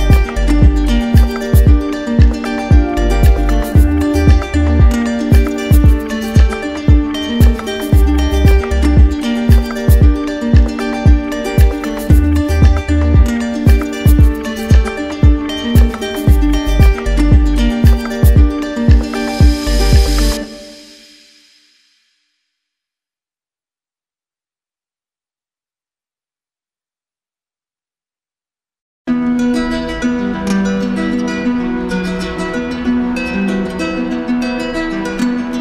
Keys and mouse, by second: 0.1-1.2 drag, 2.0 click, 2.7 shift+click, 3.9 click, 5.3 alt+click, 7.8 click, 8.8 click, 18.4 click, 23.0-24.1 drag, 30.0 click, 30.6 click, 33.1 click.